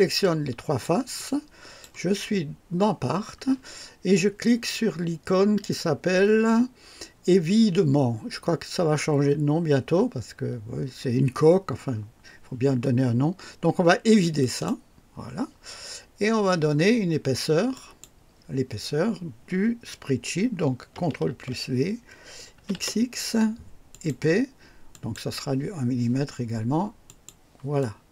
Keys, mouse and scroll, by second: 0.2-1.0 ctrl+drag, 1.1-2.0 drag, 14.4 click, 17.7 click, 21.3 ctrl+v, 22.5 x, 23.9 click, 24.9 click, 27.0 click, 27.8 click.